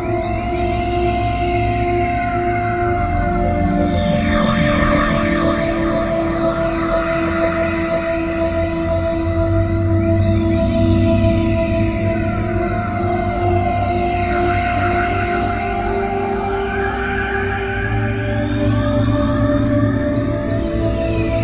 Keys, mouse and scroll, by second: 8.8 click, 12.1 middle click, 18.4 click.